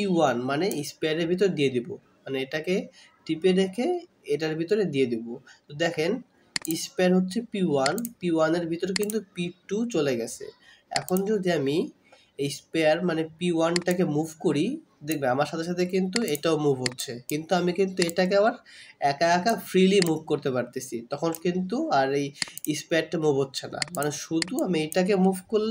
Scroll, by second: 0.4-0.8 scroll up 1.